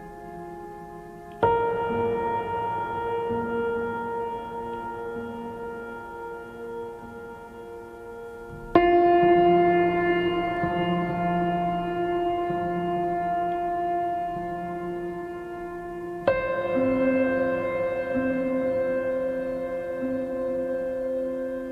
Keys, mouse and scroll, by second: 4.1-9.1 drag.